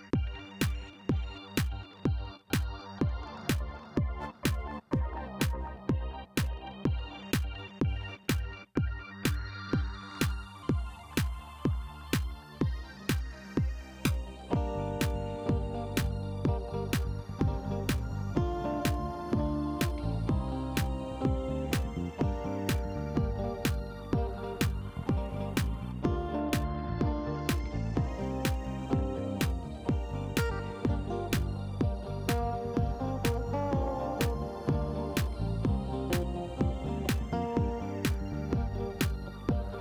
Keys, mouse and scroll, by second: 0.4 click, 1.8 click, 3.4 click, 3.9 middle click, 5.3 click, 6.4 click, 7.6 click, 8.1 middle click, 9.3 click, 10.1 click, 11.0 click, 14.8 middle click, 15.1-16.8 scroll down 1, 16.8-18.3 middle drag, 19.2 click, 20.5 middle click, 22.3-23.5 drag, 23.7 scroll up 1, 24.9 click, 26.0 click, 29.4 click, 30.7 middle click, 30.9 scroll down 1, 31.2 middle click, 36.1 click, 39.0 click.